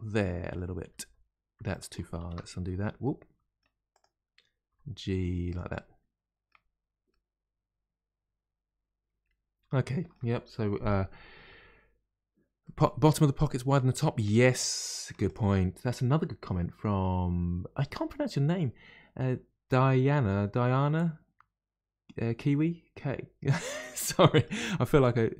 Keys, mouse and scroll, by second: 0.8 g, 2.0 ctrl+z, 2.2 ctrl+z, 3.0 middle click, 3.9 click, 4.7 g, 5.7-6.7 middle drag, 6.7-7.1 scroll down 1, 7.1-10.1 middle drag, 12.6-15.1 middle drag, 15.1 3, 15.2 click, 24.1 middle click, 24.8 g.